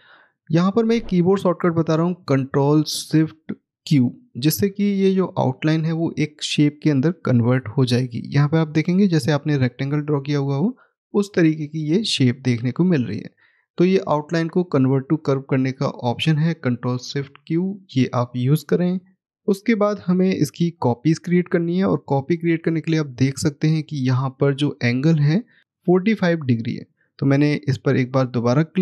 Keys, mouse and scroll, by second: 13.7-14.3 scroll down 1, 15.5 middle click, 17.8-18.8 scroll down 1, 18.8 middle click, 26.6 click.